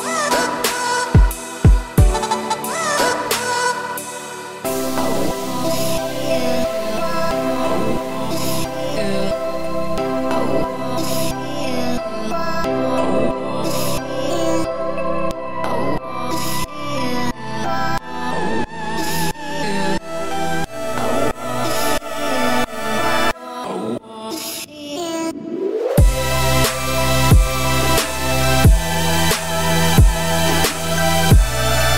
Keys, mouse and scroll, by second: 0.2 s, 1.5-1.8 scroll down 2, 1.8-2.9 middle drag, 2.9 `, 3.3 scroll down 1, 3.4 middle click, 3.8-4.2 scroll down 1, 4.2 middle click, 4.4 e, 6.1 e, 8.0 s, 9.7 middle click, 10.3 g, 11.3 middle click, 11.6 Tab, 11.8-15.2 middle drag, 15.2 Tab, 15.5 scroll up 1, 15.6 middle click, 16.4 s, 17.5 Tab, 17.6-19.0 middle drag, 19.0 scroll up 1, 19.1 Tab, 19.5 middle click, 23.5 middle click, 23.9 scroll up 1, 24.2 e, 25.9 Tab, 26.6 alt+x, 28.8 click, 29.8 click, 30.7-31.9 shift+drag.